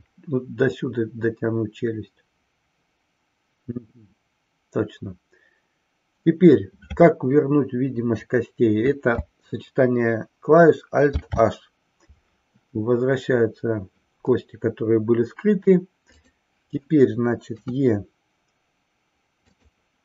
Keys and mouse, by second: 11.1 alt+h, 16.1 click, 17.7 KP_3, 19.3 click.